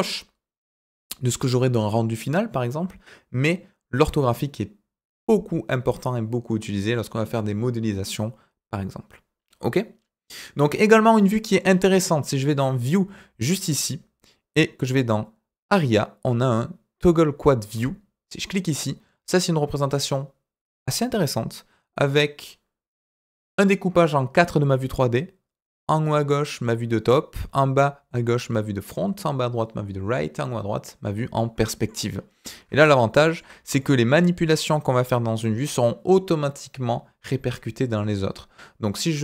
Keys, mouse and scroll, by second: 10.8 scroll down 2, 11.2 middle drag, 11.6 scroll up 1, 12.3-18.4 drag, 31.3-31.9 middle drag, 32.2 scroll down 2, 32.7-33.3 shift+middle drag, 33.7 shift+middle drag.